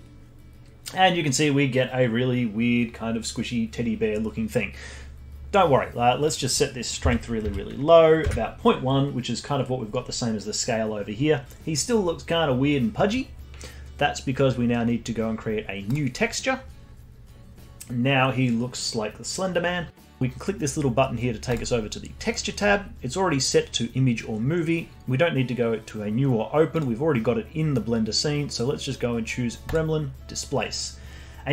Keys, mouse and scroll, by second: 1.0-1.7 scroll down 3, 1.8-4.3 scroll up 1, 4.3-6.2 scroll up 1, 6.2-9.2 drag, 15.8-19.0 drag, 21.5-24.5 drag, 26.7-30.3 drag.